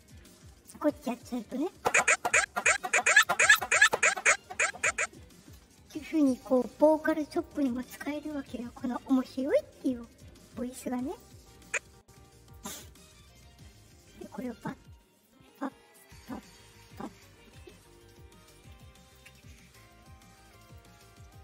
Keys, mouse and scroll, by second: 0.2 click, 6.3 click, 6.8 click, 7.2 click, 9.4 click, 11.0 click, 11.6-12.4 drag, 14.0 shift+click, 15.2 shift+click, 15.9 shift+click, 16.6 shift+click, 18.1 ctrl+shift+click, 20.7 click.